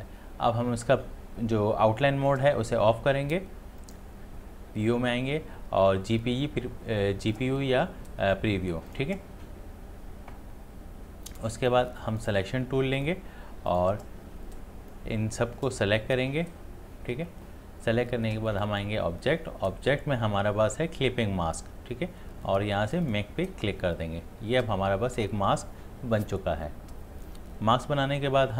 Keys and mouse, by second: 8.9 click, 12.2-18.6 drag, 23.1 click.